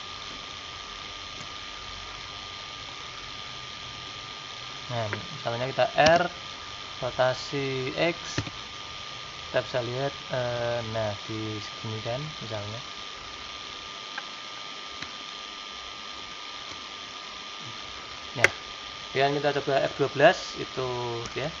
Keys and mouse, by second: 3.8-6.0 middle drag, 6.0 r, 15.3-21.6 middle drag.